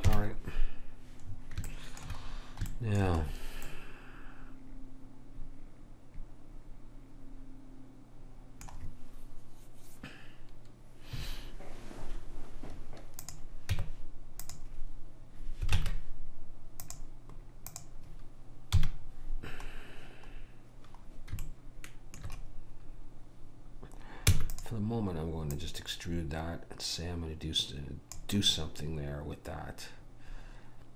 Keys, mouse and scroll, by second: 0.1 KP_1, 1.3-5.7 middle drag, 13.3 click, 13.8 Tab, 15.8 ctrl+Tab, 17.8 click, 18.8 KP_1, 21.5-24.3 middle drag, 24.3 e, 25.6 click, 28.6 middle click.